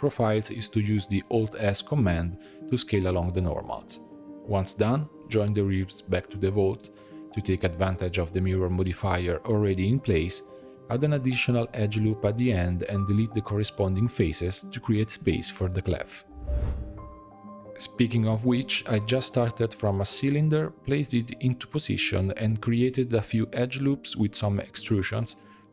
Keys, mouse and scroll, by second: 0.1 alt+s, 0.5 middle click, 0.8 alt+click, 1.4 alt+s, 2.9 alt+shift+click, 3.1 alt+s, 4.1 ctrl+j, 4.7-5.4 scroll down 6, 5.4-9.5 shift+middle drag, 9.5 click, 10.1-10.5 shift+middle drag, 10.5 click, 10.8 Tab, 11.1-12.3 scroll up 4, 12.3 ctrl+r, 13.5 3, 14.1 alt+click, 14.9 x, 16.9 s, 18.0 middle click, 18.1 3, 18.3 click, 18.5 middle click, 18.9 shift+click, 19.2 x, 19.6 a, 19.9 s, 20.8 g, 21.9 alt+click, 22.1 g, 23.5 ctrl+r, 24.2 3, 24.4 alt+click, 24.8 alt+e.